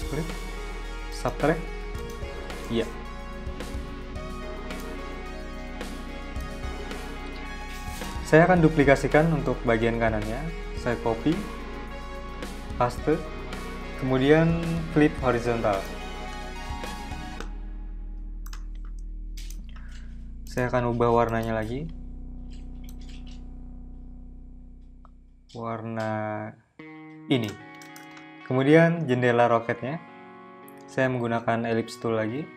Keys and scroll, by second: 10.3 super+c, 11.1 super+v, 29.5 m, 31.4 m.